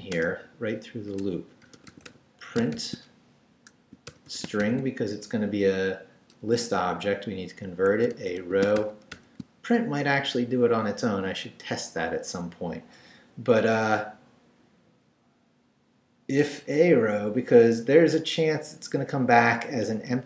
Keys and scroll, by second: 0.2 Return, 1.4-5.1 typing, 7.7-9.3 typing, 17.5 Up, 18.1 Left, 19.8 Left.